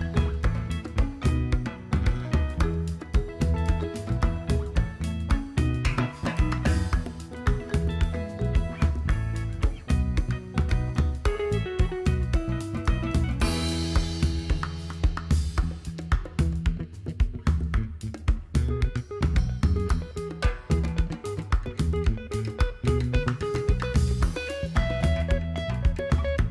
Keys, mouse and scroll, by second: 3.3 Delete, 4.2 click, 5.1 Delete, 5.6 click, 6.4 Delete, 7.5 click, 10.9-15.8 drag, 16.1 alt+scroll down 1, 16.3-16.6 alt+scroll up 1, 17.0 click, 18.0 right click, 18.3 click, 22.8 click, 22.9 click, 23.0 right click.